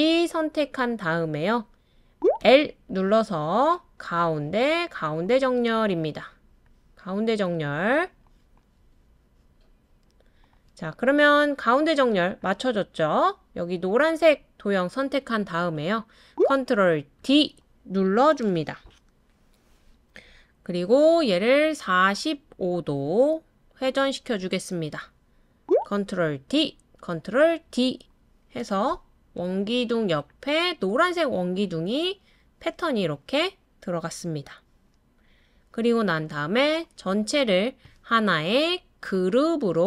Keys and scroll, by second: 8.8 typing, 17.2 super+d, 26.4 super+d, 27.7 super+d.